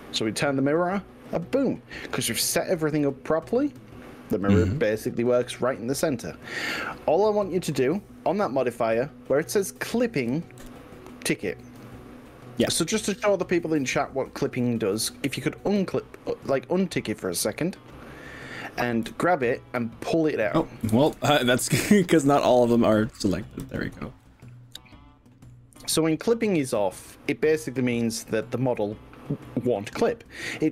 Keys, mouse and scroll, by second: 1.3-2.7 middle drag, 3.1-6.8 middle drag, 10.7 click, 17.7-18.1 drag, 19.1 g, 20.5 click, 20.9 ctrl+z, 22.0-22.7 middle drag, 23.7 shift+drag, 24.3-25.7 middle drag, 25.9 g.